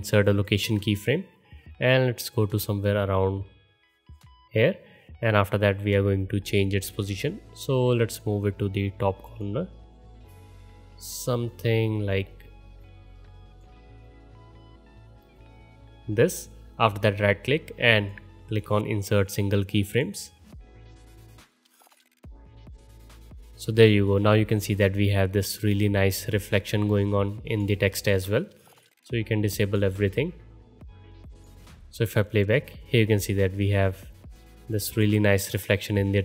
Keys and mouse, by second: 11.0 middle click, 21.9 space, 22.9 space, 25.3-26.1 middle drag, 26.5-28.2 middle drag, 28.2 click, 28.3-29.6 right drag, 29.8 right click, 30.2 click, 30.9-31.3 right drag, 31.6 space, 32.7 space, 36.0-36.2 middle drag.